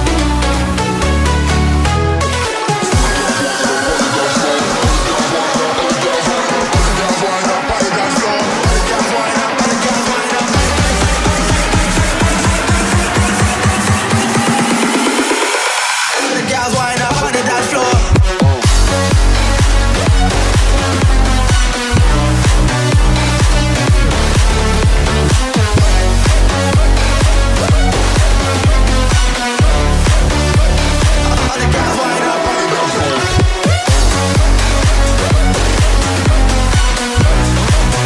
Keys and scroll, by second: 2.0 space, 9.0 space, 11.7 ctrl+space, 12.0 ctrl+z, 23.4 space, 28.5 space, 33.9 space.